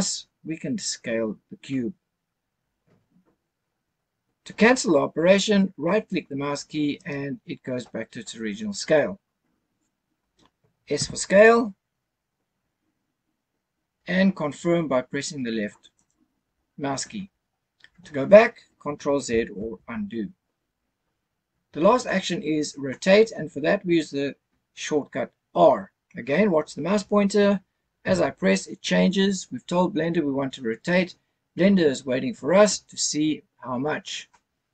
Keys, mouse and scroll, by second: 6.9 right click, 11.0 s, 16.0 click, 19.6 ctrl+z, 28.0 r.